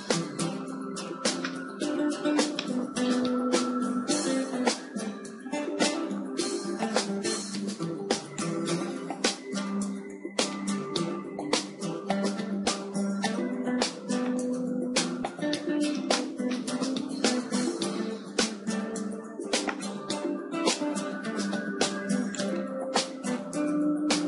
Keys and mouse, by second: 0.1-3.1 middle drag, 3.1 KP_0, 7.2-10.5 drag, 11.1-12.8 middle drag, 14.8 KP_1, 16.8 middle click, 17.8 KP_3, 18.0 middle click, 19.2 shift+d, 20.8-24.2 drag, 21.4 r, 23.0 g.